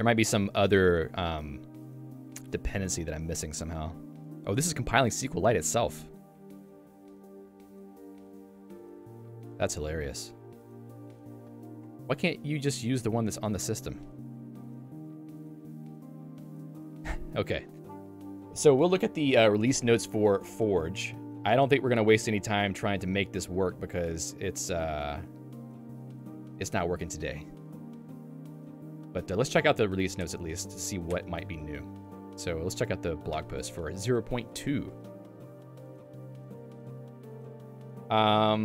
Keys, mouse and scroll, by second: 10.5 super+e, 17.1 Escape, 24.0 click.